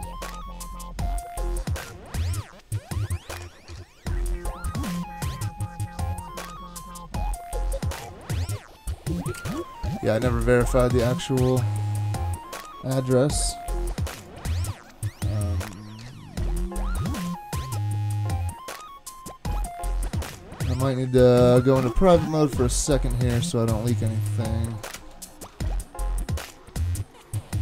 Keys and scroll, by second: 9.4 super+Tab, 24.9 alt+super+0.